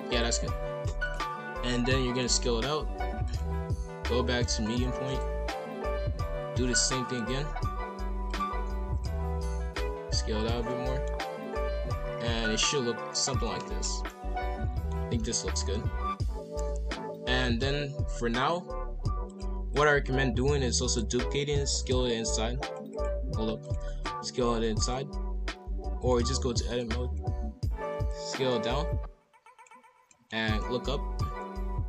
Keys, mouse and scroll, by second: 0.1-1.5 drag, 1.5 s, 3.2-4.9 drag, 4.9 shift+d, 5.3 r, 8.3-9.3 drag, 9.3 s, 10.6 middle click, 11.1-11.5 scroll down 3, 11.5-12.8 middle drag, 12.8 scroll up 1, 13.1-15.0 middle drag, 15.0 scroll up 1, 15.1 middle click, 15.6 a, 16.0-16.4 scroll down 3, 16.4 KP_5, 16.5 KP_1, 17.0 scroll up 3, 19.3 click, 20.0 scroll down 2, 20.5 scroll up 2, 20.8 shift+d, 21.1 s, 22.6-24.0 drag, 24.0 s, 26.0-27.0 drag, 27.0 a, 28.1 click, 30.1 middle click, 30.4 KP_5, 30.5 KP_1, 30.8 KP_7, 31.6 r.